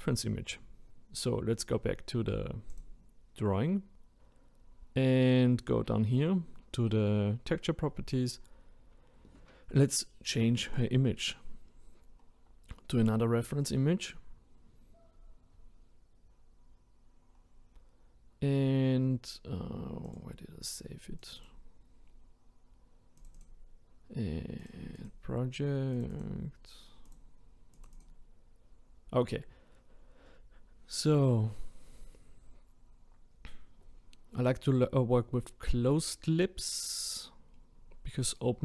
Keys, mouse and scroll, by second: 2.7-5.6 drag, 10.6-38.6 drag.